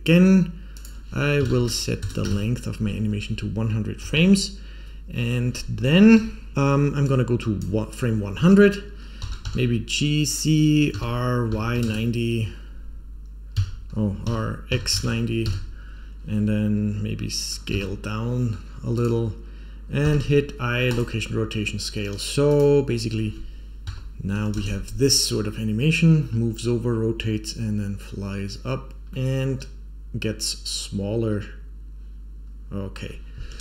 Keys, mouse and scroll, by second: 0.7 click, 4.0 Home, 5.4-6.1 scroll down 1, 6.1 Home, 6.5-7.0 scroll down 6, 7.0 click, 9.1 g, 10.9 r, 14.2 r, 17.6 s, 19.9 i, 21.5-22.4 scroll down 1, 22.4 click, 22.4 scroll down 2, 23.8 Home, 24.5 space, 29.0-32.9 middle drag, 33.5 space.